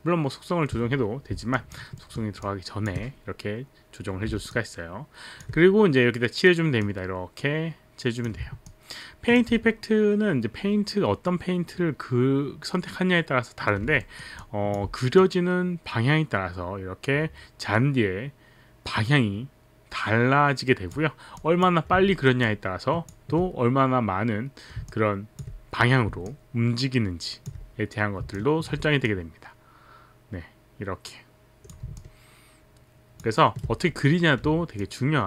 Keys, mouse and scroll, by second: 1.5 alt+click, 2.0 alt+middle click, 2.0 alt+click, 2.4 alt+click, 4.5 alt+click, 6.9 click, 8.6 alt+click, 14.0 alt+middle click, 14.4 alt+click, 15.2 click, 21.4 click, 22.1 alt+middle click, 22.6 alt+middle click, 25.5 alt+click, 26.2 alt+click, 28.3 alt+click, 29.3 click, 32.0 alt+click, 33.4 alt+right click, 34.8 alt+click.